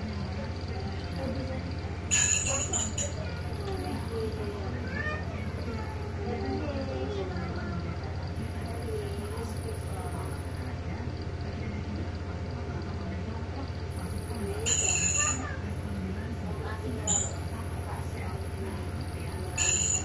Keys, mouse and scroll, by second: 1.0-2.5 drag, 2.7-3.1 ctrl+scroll up 1, 3.7 1, 6.4 click, 9.7-12.0 drag, 13.4 click, 14.6-15.0 ctrl+scroll up 2, 16.1-16.5 scroll up 2.